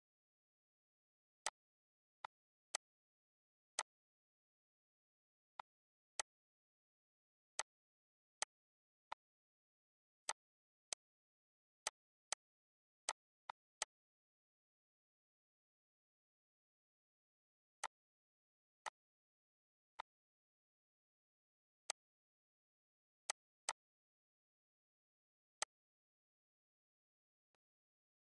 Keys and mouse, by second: 1.4 click, 2.1 click, 3.6 click, 5.5 click, 6.1 click, 7.4 click, 7.8 ctrl+s, 8.3 click, 9.0 ctrl+click, 10.2 click, 10.8 click, 11.7 click, 13.0 click, 17.7 click, 18.8 click, 19.9 click, 21.8 click, 23.2 click, 25.5 click, 26.5 click, 27.4 click.